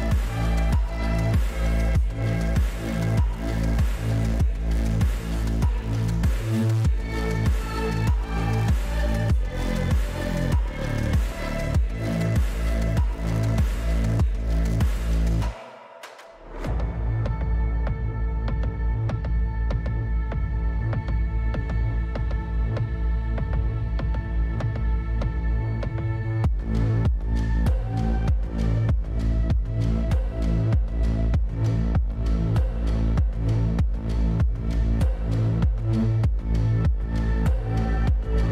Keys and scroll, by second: 0.0-0.5 typing, 22.5-23.4 typing, 30.0 k, 34.1-35.0 typing.